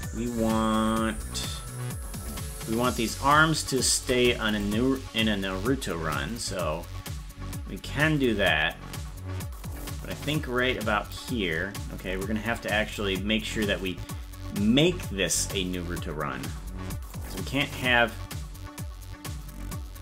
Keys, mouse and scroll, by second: 3.1 right click, 4.7-11.2 drag, 13.0-15.6 drag, 17.2-20.0 drag.